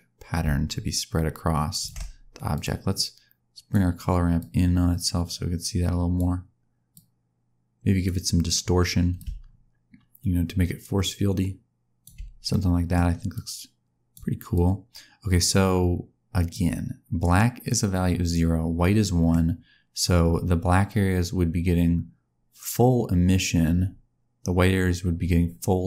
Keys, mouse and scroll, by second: 2.5 click, 2.9 click, 4.3 click, 6.9 click, 9.1 click, 12.4 middle click, 13.3 click, 14.5 click, 17.6 click, 18.9 middle click.